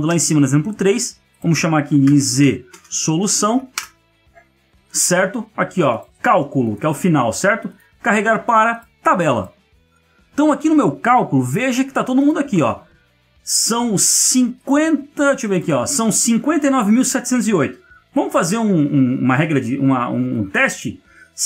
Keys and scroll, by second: 12.5 ctrl+space.